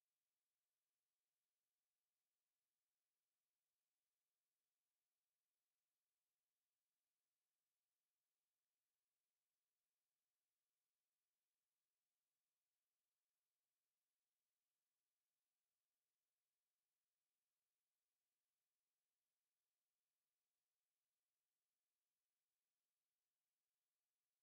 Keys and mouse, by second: 0.0 ctrl+click, 1.5 ctrl+click, 2.7 ctrl+click, 3.3 ctrl+click, 4.5 click, 6.1 alt+click, 7.3 ctrl+z, 9.1 alt+click, 9.7 alt+middle click, 10.1 alt+click, 10.5 ctrl+z, 10.7 ctrl+z, 11.4 alt+middle click, 11.7 alt+click, 12.8 r, 14.4 alt+click, 14.8 alt+middle click, 15.7 click, 16.0 click, 17.9 click, 19.3 click, 19.8 click, 22.3 click, 22.5 click, 23.3 click, 23.5 click, 24.1 alt+click.